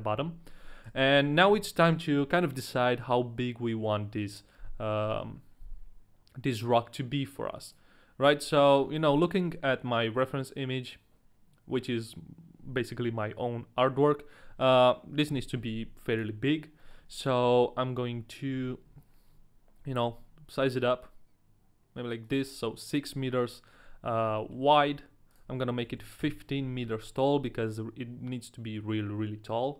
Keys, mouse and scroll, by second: 1.5 KP_1, 15.3 KP_1, 15.7 z, 16.5 scroll down 2, 17.0 shift+middle click, 17.0 KP_1, 17.0 z, 18.5 n, 20.0 s, 22.5 ctrl+click, 22.5 s, 24.6 ctrl+click, 24.6 shift+middle click, 25.3 click, 26.8 scroll down 2, 27.3 shift+middle click, 27.3 click.